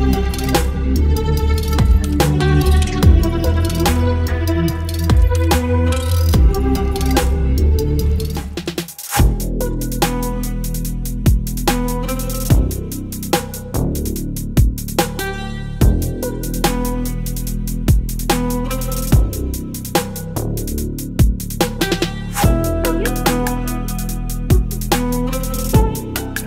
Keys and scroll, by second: 19.0 Return, 19.5 space.